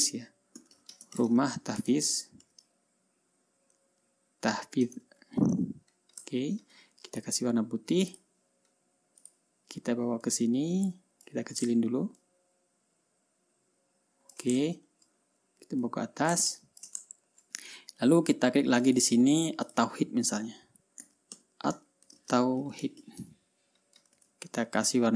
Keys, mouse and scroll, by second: 0.8-3.4 typing, 5.1-5.9 typing, 6.9 ctrl+a, 8.6 click, 9.8 click, 10.8 click, 12.7 ctrl+shift+click, 15.2-16.0 ctrl+shift+scroll up 3, 16.0-16.4 scroll up 1, 16.4 click, 17.7-19.0 ctrl+shift+scroll down 3, 19.0-19.4 scroll down 1, 19.4 click, 20.2 click, 21.3-24.2 typing, 24.7 ctrl+a.